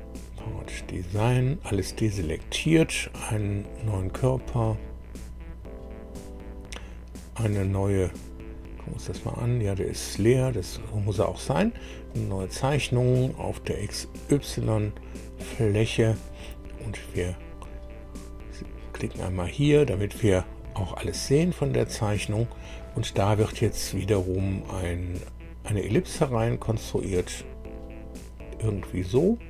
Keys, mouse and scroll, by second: 0.8 click, 1.6 click, 3.7 click, 8.4-8.8 scroll down 1, 12.0 click, 13.7 click, 15.3 click, 19.2 click, 21.1 scroll up 1, 25.9 click, 26.8 click.